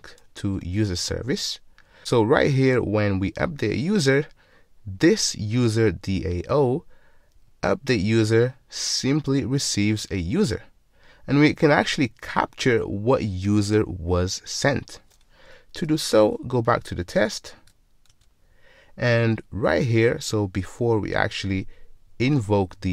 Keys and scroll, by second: 17.7 ctrl+Tab.